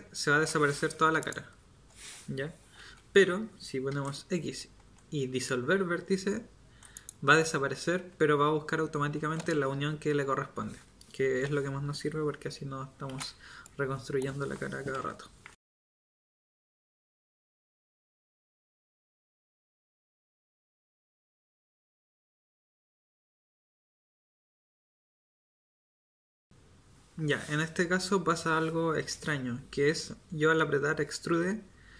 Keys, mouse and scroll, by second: 2.8 ctrl+z, 3.9 x, 13.1 ctrl+z, 14.9-19.8 typing, 21.6 k, 22.2 k, 23.4-25.8 typing, 24.8 ctrl+z, 25.4 ctrl+z.